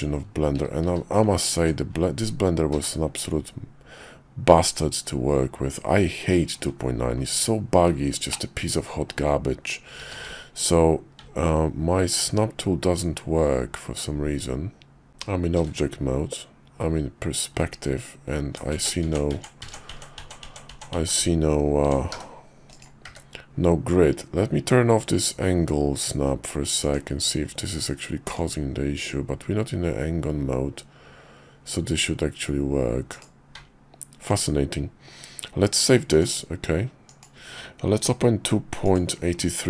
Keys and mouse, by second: 0.8 q, 2.7 q, 8.3 middle click, 10.0 q, 15.5 shift+v, 22.1 s, 23.0 d, 36.0-37.4 drag.